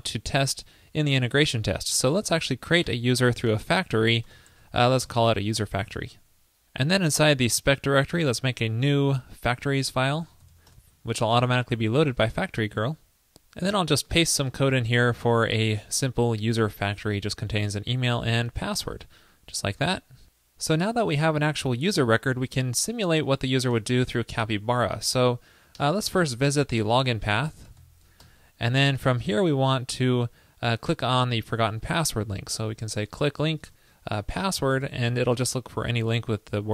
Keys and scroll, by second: 5.7 super+s, 14.6 super+v, 19.1 super+s, 23.8 super+Return, 28.2 super+Return.